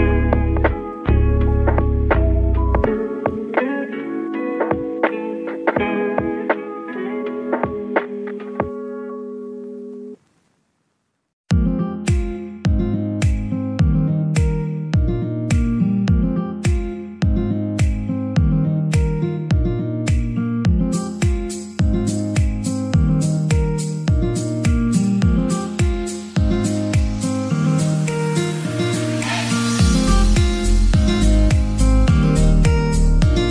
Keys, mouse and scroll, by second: 0.3 click, 1.2 ctrl+r, 1.5 click, 1.8 right click, 2.0-3.1 middle drag, 3.1 2, 3.4 click, 3.6 middle click, 4.1 g, 5.6 click, 5.8-7.1 middle drag, 7.1 alt+click, 7.8 g, 8.8 z, 9.5 click, 9.7-12.7 shift+middle drag, 12.7 click, 13.1 middle click, 13.4-15.7 typing, 14.2 click, 14.8 alt+click, 15.1 alt+middle click, 16.5 click, 17.2 click, 17.2 g, 17.5 y, 18.9 click, 19.1 g, 19.5 z, 20.4 click, 20.7-22.0 middle drag, 22.0 Tab, 22.3 scroll down 1, 22.4 middle click, 23.0 Tab, 23.1-24.3 middle drag, 24.2 g, 24.5 y, 27.0 click, 27.5 alt+click, 28.0 g, 28.2 y, 29.5 click, 29.7 middle click, 30.4 click, 30.7 middle click, 30.9 g, 31.1 y, 32.8 click, 33.0 middle click, 33.2 Tab, 33.4-33.5 scroll down 5.